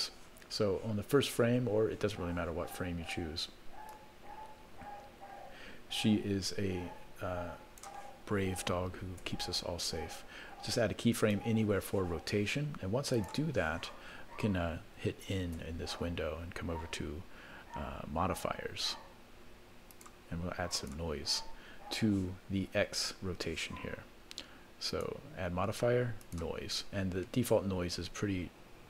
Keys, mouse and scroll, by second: 3.9-6.9 drag, 13.1-14.2 drag, 15.5 n, 16.3-18.2 scroll down 3, 18.2 scroll down 4, 18.2-19.5 scroll up 5, 19.9 click, 20.7-23.8 drag, 24.9-26.4 drag.